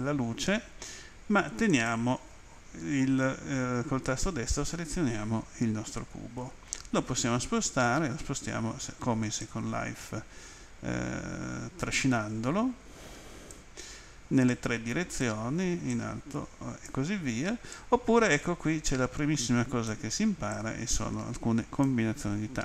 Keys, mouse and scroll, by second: 1.7 right click, 9.4 click, 14.5 click, 15.9 click, 17.7 click, 20.5 click.